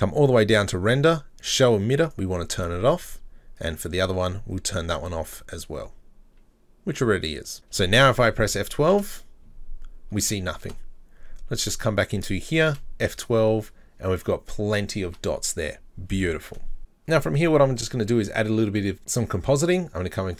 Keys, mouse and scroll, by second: 2.1 click, 2.4-3.6 scroll up 26, 3.6 click, 3.9-7.6 scroll down 23, 10.6 F12, 11.7-12.7 drag, 15.1 F12.